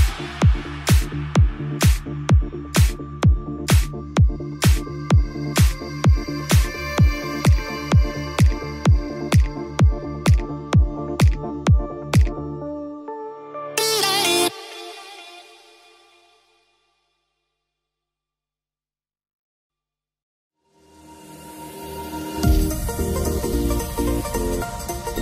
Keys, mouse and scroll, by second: 1.0 ctrl+z, 1.2 ctrl+z, 1.5 ctrl+z, 1.7 ctrl+z, 2.1 ctrl+z, 2.4 ctrl+z, 2.7 ctrl+z, 2.9 ctrl+z, 3.4 ctrl+z, 3.5 ctrl+z, 3.7 ctrl+middle click, 4.1 ctrl+z, 4.3 ctrl+z, 4.6 ctrl+z, 5.1-5.5 middle drag, 6.7 shift+z, 6.9 shift+z, 8.0 ctrl+shift+z, 8.2 ctrl+shift+z, 8.5 ctrl+shift+z, 9.1 click, 11.8 ctrl+z, 13.2 ctrl+z, 13.5 ctrl+z, 16.5 Tab, 17.2 Tab, 17.6-18.1 middle drag, 23.2 click, 23.5 click, 24.4 Tab, 24.9 Tab.